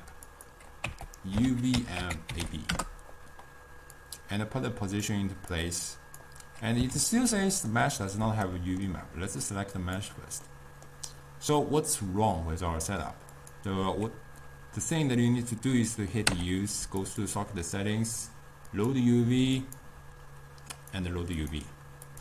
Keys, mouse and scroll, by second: 5.6 click, 10.1-11.8 drag, 11.8-17.1 middle drag, 17.1 u, 20.9 click.